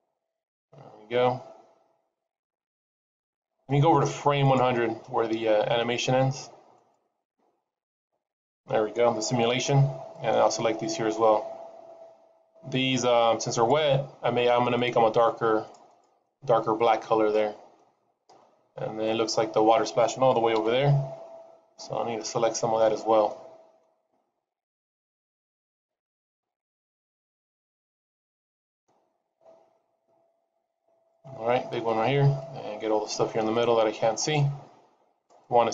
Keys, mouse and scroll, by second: 6.6 click, 9.4 c, 16.1 middle click, 16.8 scroll up 2, 17.2 shift+middle click, 20.5 c.